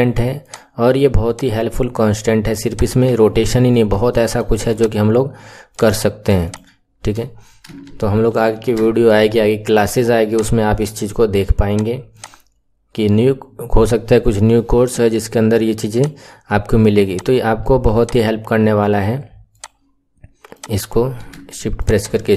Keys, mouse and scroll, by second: 4.1-4.7 shift+middle drag, 4.7 click, 5.7 click, 6.4 shift+click, 8.3 ctrl+shift+c, 11.7 click, 12.2 click, 15.9-20.5 drag, 21.7 shift+click.